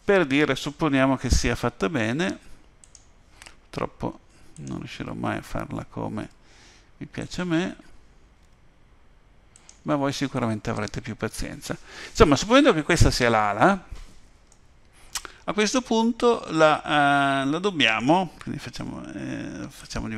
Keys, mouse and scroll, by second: 0.9-1.5 scroll down 2, 2.8 click, 4.5 click, 6.2 Tab, 7.2 click, 8.4 g, 14.5 middle click, 18.8 z.